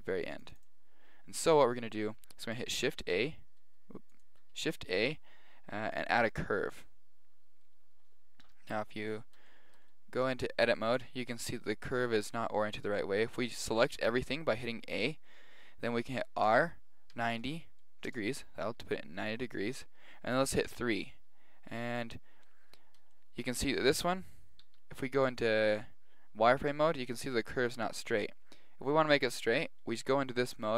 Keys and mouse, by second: 4.2 click, 4.5 shift+a, 9.5-12.9 middle drag, 10.7 Tab, 13.0 middle click, 13.7 a, 13.9 a, 16.5 r, 18.8-21.2 middle drag, 21.6-23.4 middle drag, 24.6 z, 24.9 middle click.